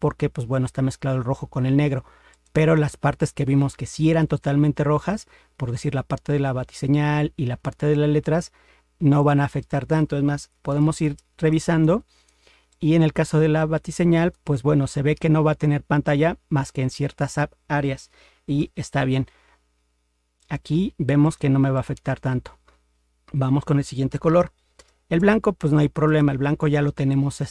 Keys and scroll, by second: 18.6 ctrl+0.